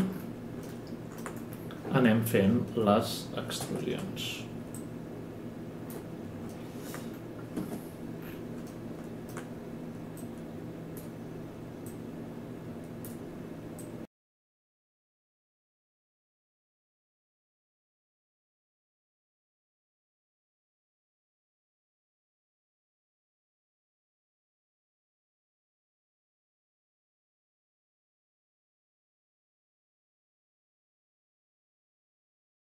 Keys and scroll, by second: 3.6 ctrl+e, 7.5 space, 18.2 ctrl+e, 22.5 ctrl+e, 30.5-31.1 typing, 32.1 F11, 32.3 F10.